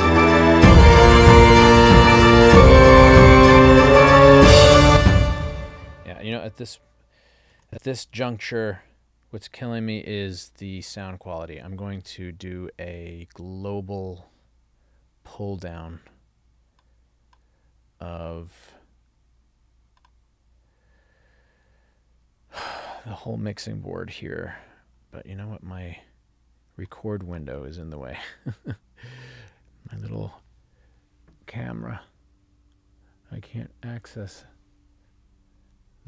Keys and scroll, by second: 4.9 space, 5.3 ctrl+alt+l, 7.6 ctrl+alt+l.